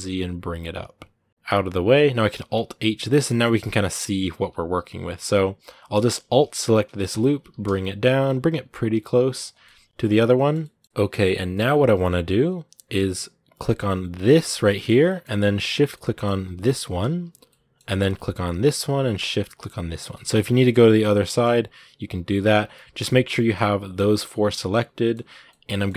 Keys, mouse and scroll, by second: 3.1-4.2 middle drag, 4.2 a, 6.5 alt+right click, 7.0 scroll up 2, 7.2 g, 9.4-11.8 middle drag, 11.8-13.0 scroll up 1, 13.0-14.0 scroll up 1, 14.0 scroll up 1, 14.3-16.8 shift+middle drag, 16.8 shift+right click, 17.3-18.4 middle drag, 18.4-20.2 shift+right drag, 20.2-21.2 middle drag, 21.2 scroll up 2, 22.4 scroll down 2, 22.5 middle click, 23.2 scroll up 1, 23.3-25.9 middle drag.